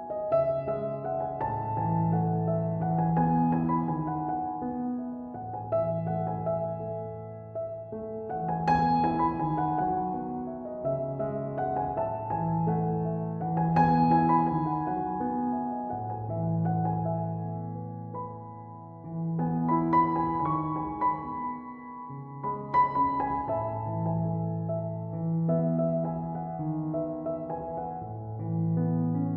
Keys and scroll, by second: 9.8-10.6 typing, 12.1-12.8 typing.